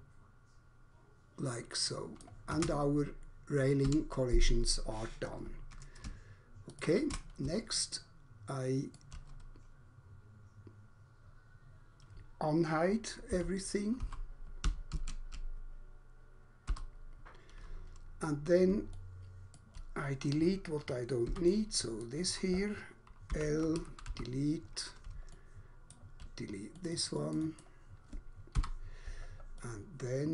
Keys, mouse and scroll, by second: 2.2 click, 2.5 space, 3.9 Escape, 6.0 ctrl+space, 7.7 alt+click, 13.4 z, 14.0 z, 14.9 Escape, 16.7 u, 18.9 alt+click, 21.2 3, 21.5 click, 22.0 click, 23.4 typing, 24.0 Delete, 25.4 alt+click, 27.5 double click, 28.5 Delete, 29.5 alt+click.